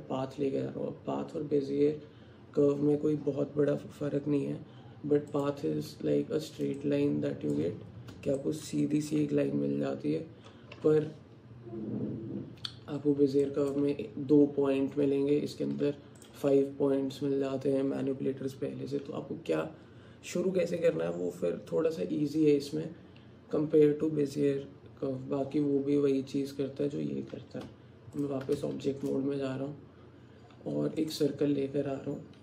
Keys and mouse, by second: 6.8 middle click, 6.9 alt+click, 8.4 shift+middle click, 13.5 click, 15.9 Tab, 27.7 Tab, 28.9 shift+a.